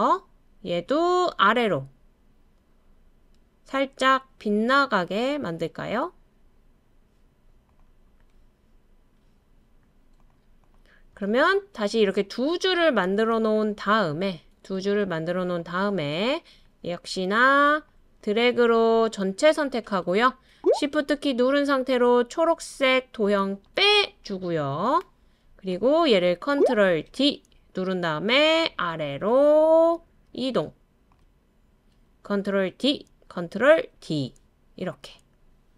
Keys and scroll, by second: 27.1 super+d, 32.7 super+d, 34.0 super+d.